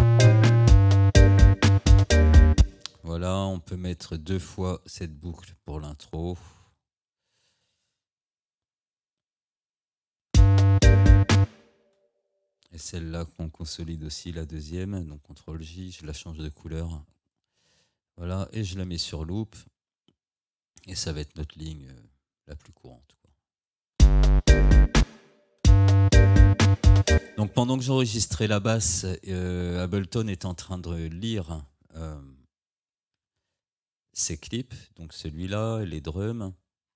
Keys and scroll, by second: 2.6 space, 8.7 ctrl+d, 10.3 space, 15.2 ctrl+j, 24.0 space, 27.2 space, 33.2 Tab.